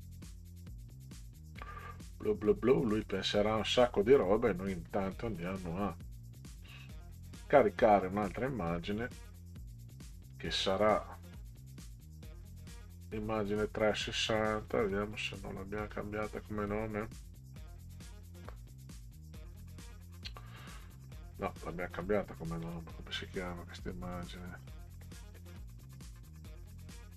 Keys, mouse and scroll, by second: 3.0 click, 4.8 click, 5.4 right click, 7.4 click, 10.3-11.4 drag, 14.5 click, 15.9-21.7 drag, 22.6 click.